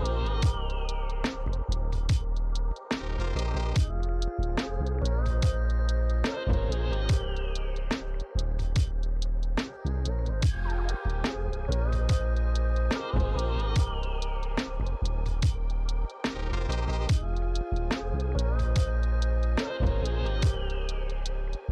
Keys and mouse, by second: 0.0 click, 0.6 f, 0.7 click, 1.7 click, 2.1 f, 2.2 click, 2.5 f, 2.5 click, 3.2 f, 3.3 click, 3.6 f, 3.7 click, 4.7 click, 6.5 click, 7.4 f, 7.4 click, 7.6 f, 7.6 click, 7.8 f, 7.9 click, 8.3 f, 9.1 click, 9.2 click, 9.7 f, 11.0 click, 12.2 f, 12.3 click, 12.4 f, 12.5 click, 12.6 f, 12.7 click, 12.9 f, 14.0 click, 14.3-16.6 typing, 14.3 click, 15.1 click, 15.7 click, 15.7 click, 16.5 click, 16.7 click, 20.2 click, 20.6 f, 20.7 click, 20.8 f, 20.9 click, 21.4 f, 21.5 click.